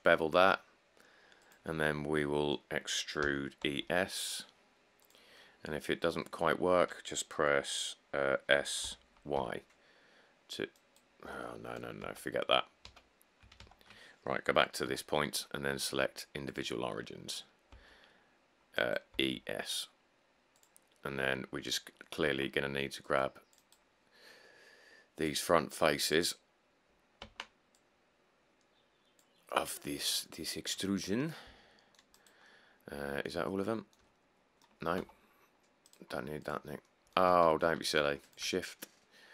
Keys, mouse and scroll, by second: 0.5 ctrl+b, 3.5-3.9 typing, 9.0-9.5 typing, 12.2 ctrl+z, 13.0 ctrl+z, 13.8 ctrl+shift+z, 15.0 ., 17.9 s, 19.4 e, 19.5 s, 22.5 c, 27.4 c, 35.2 c, 35.6-36.1 scroll, 37.6 ctrl+z.